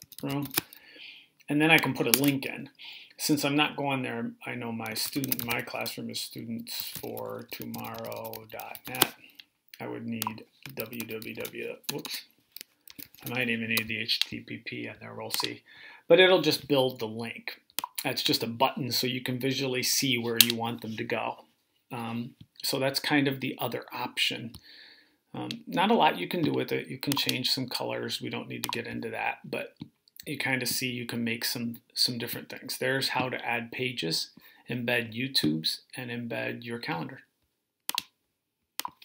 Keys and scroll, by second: 0.0-0.6 typing, 4.5-9.1 typing, 10.4-13.4 typing.